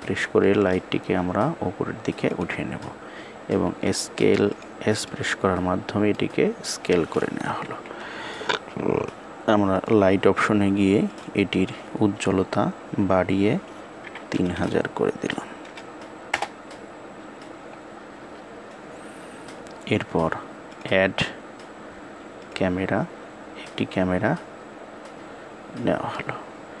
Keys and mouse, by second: 4.8-5.8 middle drag, 7.3 KP_1, 9.4 click, 10.7-16.1 drag, 14.2 KP_0, 20.5-22.2 drag, 25.9-26.8 middle drag.